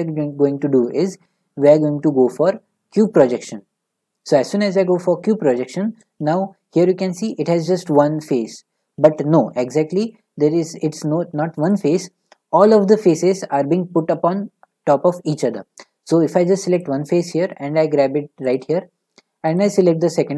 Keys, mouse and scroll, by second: 3.0-5.4 drag, 7.2-10.1 drag, 11.7 click, 16.8 click, 17.6 g, 18.5 click, 19.7-20.3 drag.